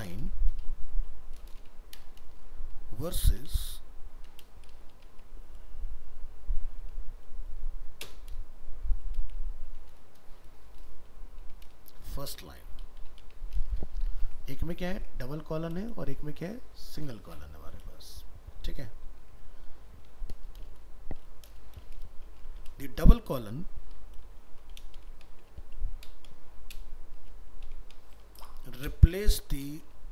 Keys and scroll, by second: 14.3 ctrl+s, 15.0 alt+Tab, 19.2 alt+Tab.